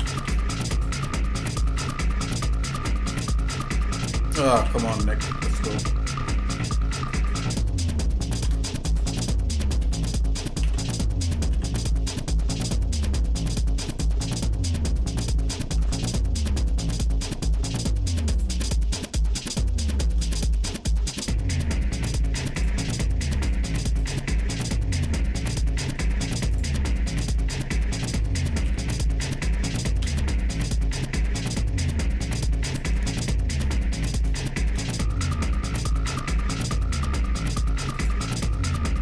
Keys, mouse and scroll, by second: 0.2 shift+d, 1.6 g, 8.4 shift+d, 9.8 g, 14.2 middle click, 14.8-15.4 scroll down 2, 15.1 middle click, 15.6 ctrl+Tab, 18.9 middle click, 19.5 shift+middle click, 20.2 middle click, 20.8 scroll up 1, 21.4 scroll up 2, 22.5 click, 24.0 click, 25.4-26.2 scroll up 4, 26.5 click, 26.8-27.2 scroll down 2, 26.9 scroll up 1, 27.3 middle click, 28.6 g, 33.1 shift+middle click, 34.5 shift+middle click, 34.9 middle click, 38.2 click.